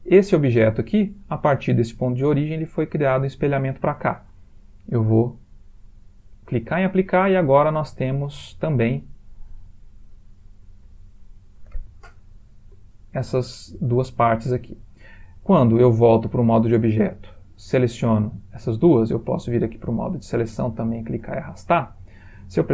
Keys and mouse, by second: 0.1 click, 5.2 click, 7.4 Tab, 8.2 shift+middle click, 8.6 shift+middle click, 9.0 click, 9.4 g, 10.6 click, 10.9 g, 12.6 middle click, 12.8 middle click, 13.4 middle click, 13.9 Tab, 19.1 click, 20.6 click.